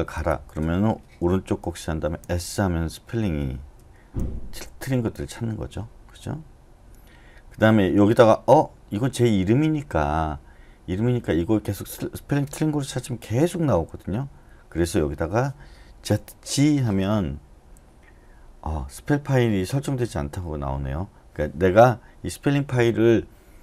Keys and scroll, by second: 1.6-2.2 typing, 3.8-5.6 typing, 16.1-16.5 typing.